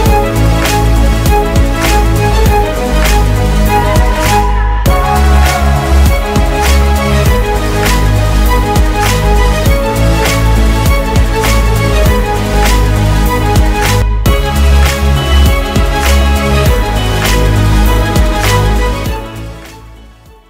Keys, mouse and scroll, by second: 4.5-5.2 typing, 13.0-13.7 typing.